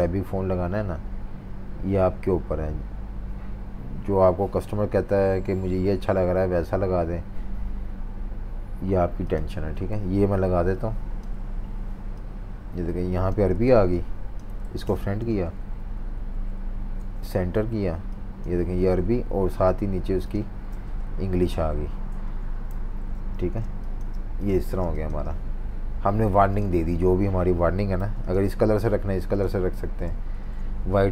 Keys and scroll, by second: 15.2 shift+super+v, 15.5 Left, 15.7 Left, 21.2 Down, 22.3 v, 22.7 super+-, 22.7 v, 22.9 super+-, 23.0 super+-, 23.4 v, 24.6 v, 27.9 i, 28.9 v, 30.4 super+z.